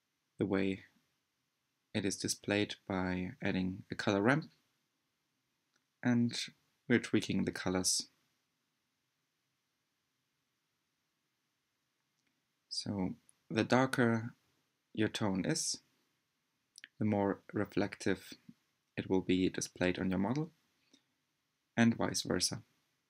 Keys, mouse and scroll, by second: 2.0 click, 19.0 click, 19.4-19.8 scroll down 2.